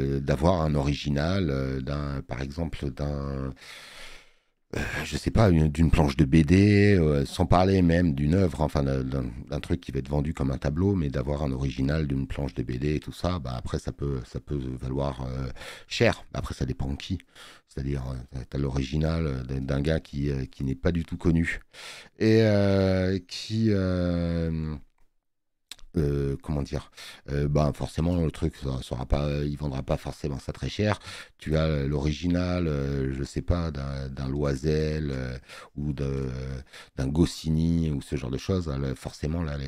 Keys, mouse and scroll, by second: 4.7 space, 15.7 space, 15.9 click.